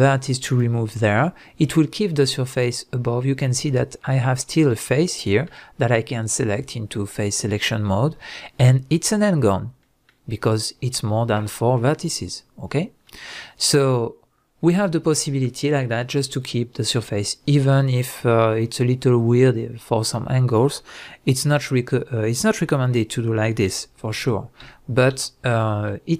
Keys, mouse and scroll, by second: 1.4 scroll up 1, 6.4 click, 7.1 click, 7.4-26.1 middle drag, 23.7 ctrl+z.